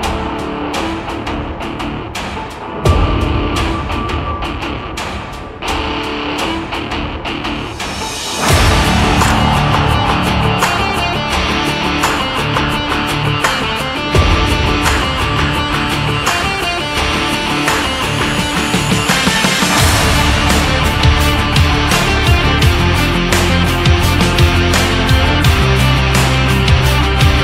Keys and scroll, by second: 12.5 BackSpace, 14.0 ctrl+s, 16.5 ctrl+-, 17.9 space.